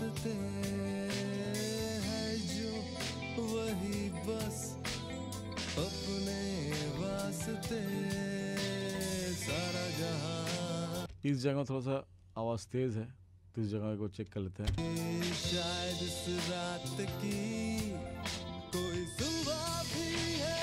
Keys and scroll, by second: 5.5 ctrl+=, 11.0 space, 14.7 space, 18.1 ctrl+=.